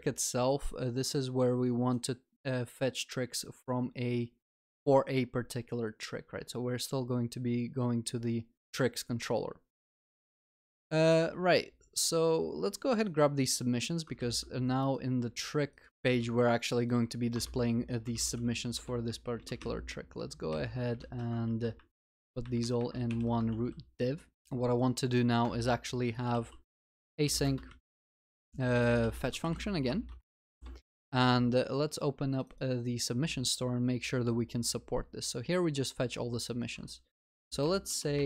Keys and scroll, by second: 14.2 ctrl+x, 15.1 ctrl+x, 15.9 ctrl+v, 16.2 ctrl+s, 18.4 Tab, 20.4 alt+shift+Down, 21.1 ctrl+alt+shift+l, 21.6 ctrl+s, 23.5 ctrl+y, 23.6 ctrl+s.